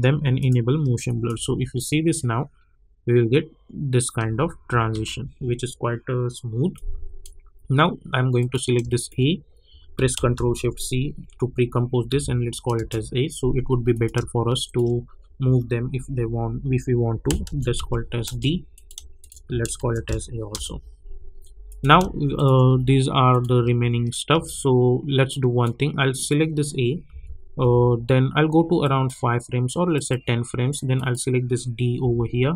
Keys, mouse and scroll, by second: 1.3 space, 4.2 space, 6.7-8.4 drag, 10.3 ctrl+shift+c, 12.1 a, 12.7 Return, 13.9 click, 17.4 ctrl+shift+c, 17.7 d, 18.2 Return, 18.7 click, 19.2 shift+click, 19.8 ctrl+shift+c, 20.0 a, 20.5 Return, 21.6 click, 23.8 space, 25.3 click, 27.1 =, 27.6 =, 28.8 click, 32.0 [.